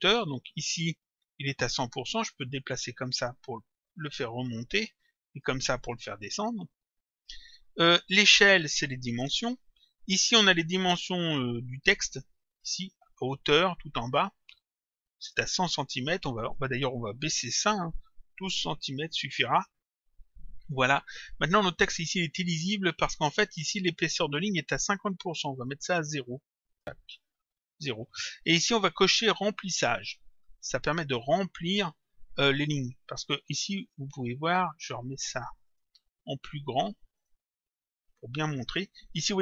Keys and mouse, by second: 2.5 click, 6.3 click, 13.1 click, 14.8 click, 16.6 click, 19.5 click, 25.8 click, 30.6 click, 33.8 click, 35.8 click, 37.2 click, 38.5 click.